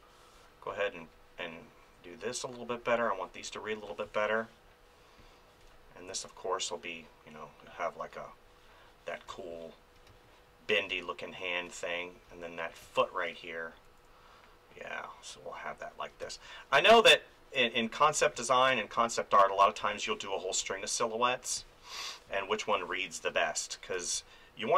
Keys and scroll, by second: 4.0 space, 9.3 space, 13.8 [, 16.2 space, 18.2 space, 19.8 space, 22.7 space.